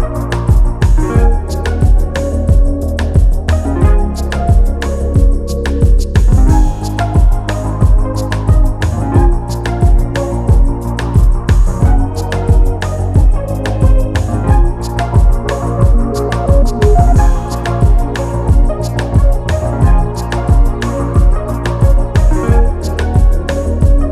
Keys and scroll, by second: 0.7 Down, 6.3 ctrl+t, 23.0 Return.